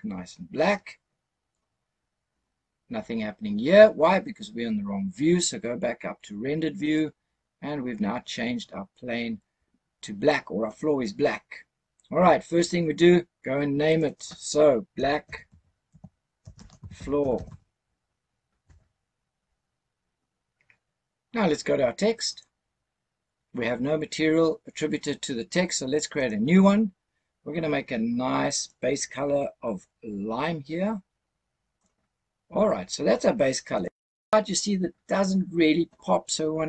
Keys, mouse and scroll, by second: 6.8 click, 13.8 click, 13.9-18.6 drag, 17.2 o, 22.2 click, 26.0 click, 28.5 click, 33.8 click.